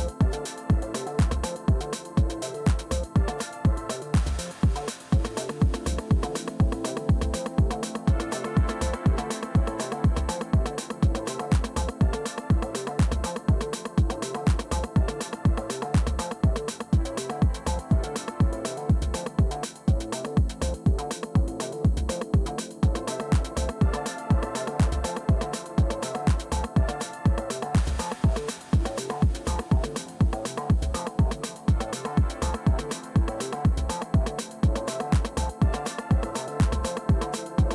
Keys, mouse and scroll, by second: 0.0-3.7 typing, 9.5-12.3 drag, 13.3-14.5 drag, 17.5-22.6 typing, 23.1 Return, 30.1-32.1 typing, 32.1 Return, 35.2-36.8 drag.